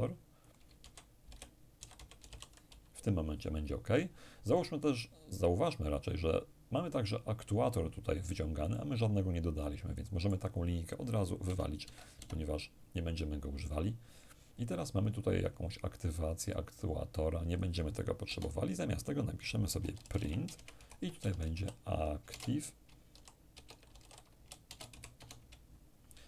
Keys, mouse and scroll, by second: 0.4-2.3 typing, 4.1 click, 6.4-10.9 drag, 8.3-10.9 middle drag, 11.1 BackSpace, 11.4 BackSpace, 11.8 BackSpace, 15.6-18.2 drag, 17.9 BackSpace, 19.3-24.8 typing.